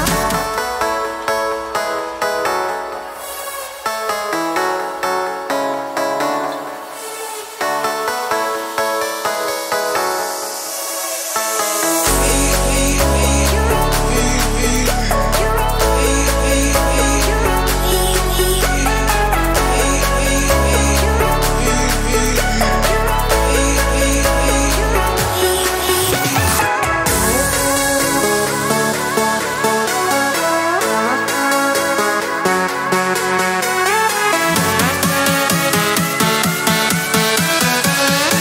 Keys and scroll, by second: 3.7-4.8 typing, 12.3 Escape, 23.0-24.2 typing.